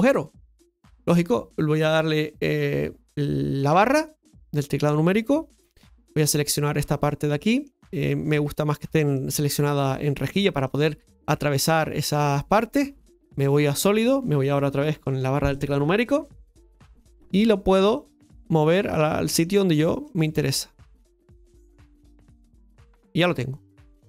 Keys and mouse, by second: 0.6-2.8 middle drag, 3.7 KP_Divide, 5.6 click, 6.8 middle click, 8.4 click, 9.1 middle click, 9.9 middle click, 10.7 click, 11.7 middle click, 13.4 click, 14.7 KP_Divide, 17.9 click, 18.9 middle click, 20.0 click, 20.9-22.3 drag, 23.2-24.0 middle drag.